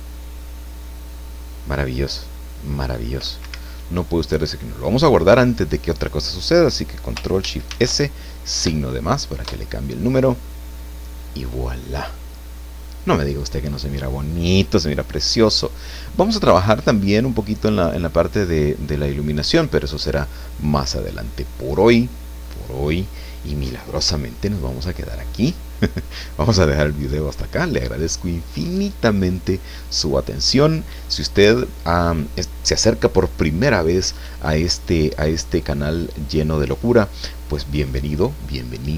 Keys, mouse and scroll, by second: 3.4 Escape, 7.7 ctrl+shift+s, 8.6 KP_Add, 9.4 KP_Enter.